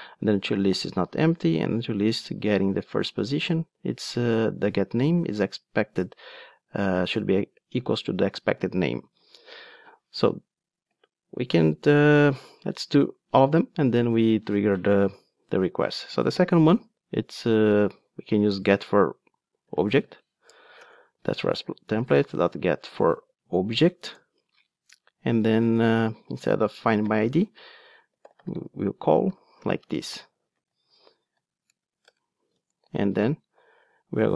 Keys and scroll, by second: 20.8 Return, 30.7 alt+shift+Right.